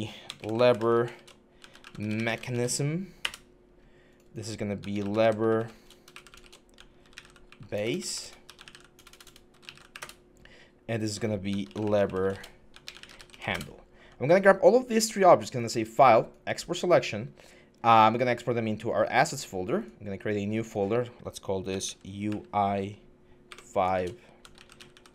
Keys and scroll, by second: 0.2-2.8 typing, 3.1 Return, 4.3-10.0 typing, 11.2-13.8 typing, 21.6-22.1 typing, 23.3-25.1 typing.